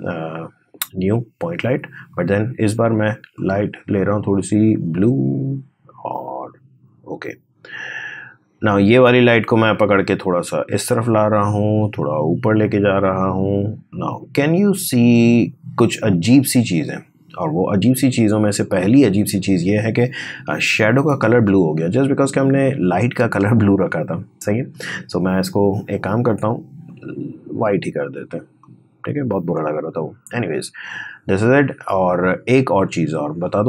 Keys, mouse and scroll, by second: 9.3-16.9 drag, 20.3-21.1 scroll up 1, 21.1 space, 21.3 click, 21.6 space, 24.5 click.